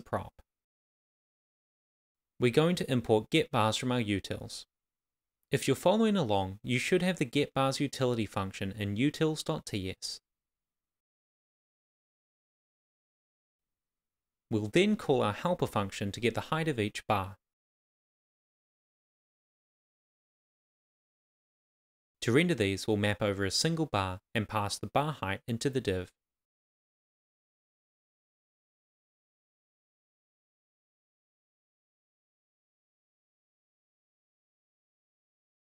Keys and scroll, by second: 0.3 shift+b, 1.1 Right, 2.4 shift+u, 2.9 super+s, 6.4 Return, 8.5-9.6 typing, 10.3 Left, 11.4-13.0 typing, 16.6 shift+o, 17.5 Tab, 17.7 Right, 18.8 Return, 19.7 shift+r, 22.4 Return, 22.5 super+s, 25.4 shift+b, 25.6 super+s, 27.9 Return, 28.1 shift+[, 28.1 shift+], 28.3 Left, 29.4 shift+9, 29.7 Left, 30.3 shift+9, 31.2 shift+h, 31.9 Right, 32.4 shift+., 32.4 shift+space, 35.0 super+x, 35.6 super+v.